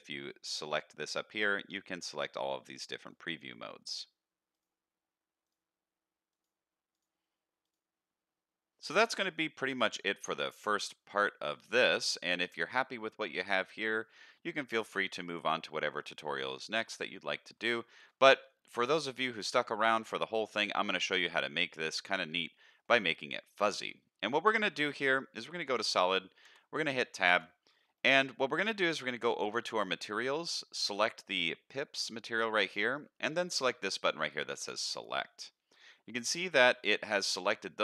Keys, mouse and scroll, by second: 9.8-10.7 middle drag, 11.0 scroll up 2, 11.4 middle click, 12.0 middle click, 13.0-14.1 middle drag, 14.4 scroll down 2, 14.8-15.2 middle drag, 15.6-16.4 middle drag, 16.9-17.5 middle drag, 17.8 shift+middle drag, 18.3-18.7 middle drag, 20.0-22.8 middle drag, 23.1 middle click, 24.9 z, 26.5 Tab, 27.3 alt+a, 28.0 middle click, 29.3 click, 30.8 click, 34.9 click, 35.7 middle click.